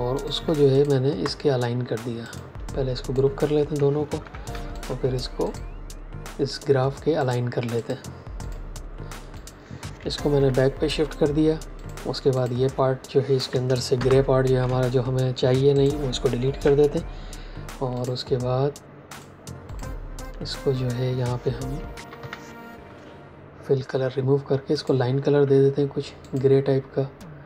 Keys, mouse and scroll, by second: 0.0 shift+click, 0.6 click, 4.0 g, 4.6 shift+click, 10.2 ctrl+shift+[, 11.7 click, 13.8 ctrl+shift+g, 14.1-14.9 typing, 15.7 click, 16.5 Delete, 17.9 click, 21.6-22.6 typing, 24.7 click.